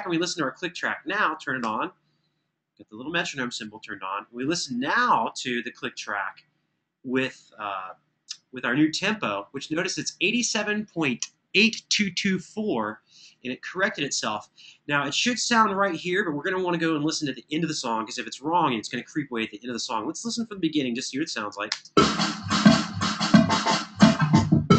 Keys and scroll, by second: 1.3 7, 21.5 space.